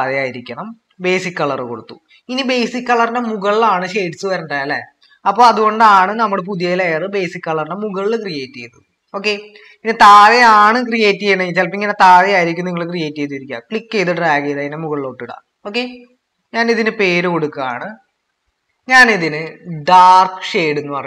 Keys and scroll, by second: 18.3 BackSpace, 19.6-21.0 typing.